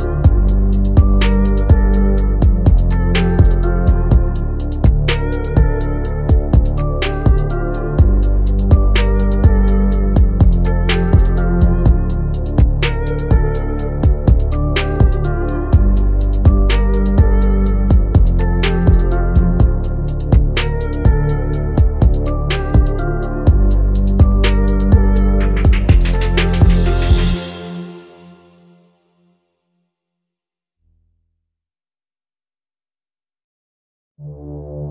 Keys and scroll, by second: 4.3 Delete, 14.0 F3, 18.5 Delete, 32.8 Escape, 34.8 F3.